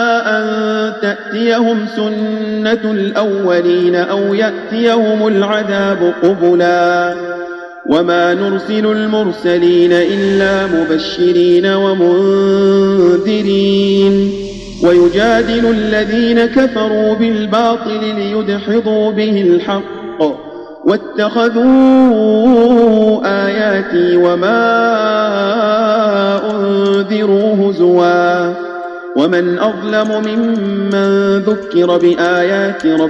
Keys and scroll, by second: 27.2 Tab, 30.8 space, 32.7 space.